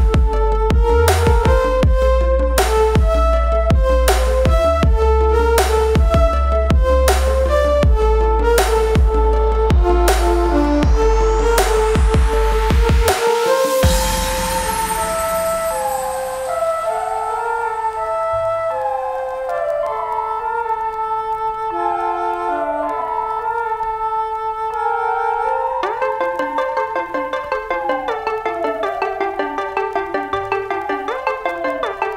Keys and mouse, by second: 1.4 click, 7.3 click, 9.8 click, 20.3-20.7 typing, 21.8 0, 26.0 click, 26.6-27.5 typing, 29.0 click, 29.9 1.